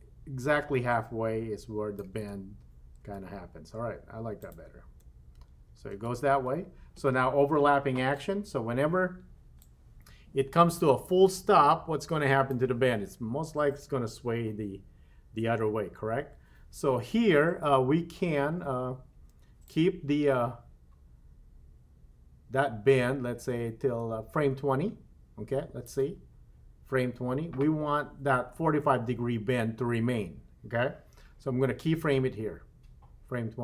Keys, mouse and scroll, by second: 2.2 space, 3.1 space, 4.5 click, 4.9 space, 6.0 space, 9.7-12.8 drag, 19.7-26.0 drag.